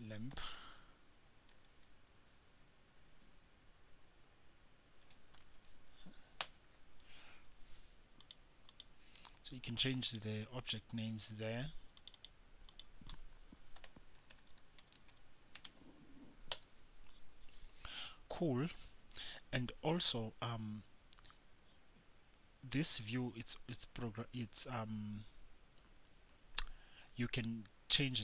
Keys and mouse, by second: 8.4-14.3 drag.